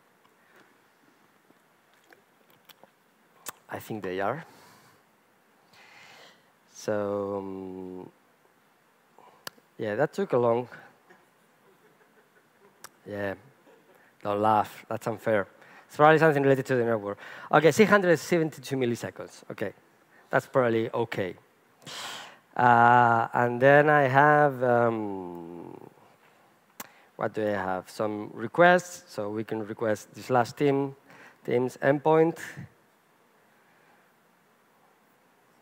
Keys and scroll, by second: 13.6 super+r, 25.3 super+e.